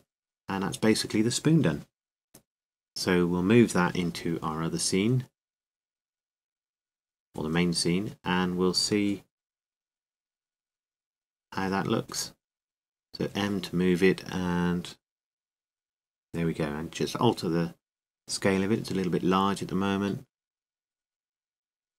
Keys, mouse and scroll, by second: 0.0 click, 2.8-4.2 drag, 4.3-5.6 middle drag, 5.8-12.9 drag, 12.9-14.0 middle drag, 14.3 m, 17.1-18.8 drag, 18.8 middle click, 20.3 s, 21.6-21.9 drag.